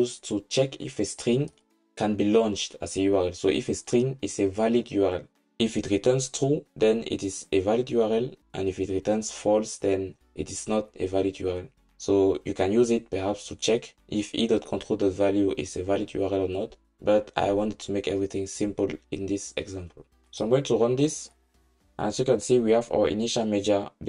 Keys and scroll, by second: 21.0 ctrl+shift+r.